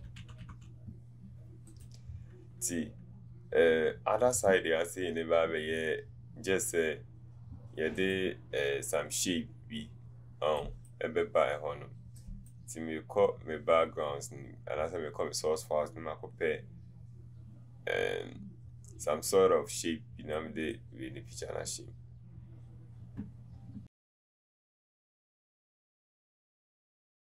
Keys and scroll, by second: 26.6 BackSpace.